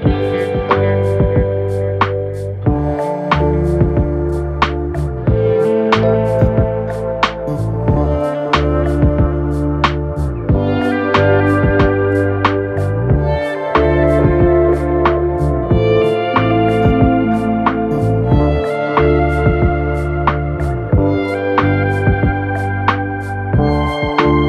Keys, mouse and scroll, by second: 0.6 ctrl+click, 2.8 alt+click, 14.7 Down, 15.0 Down, 15.2 Down, 15.3 Down, 15.5 Down, 15.7 Down, 15.9 Down, 16.0 Down.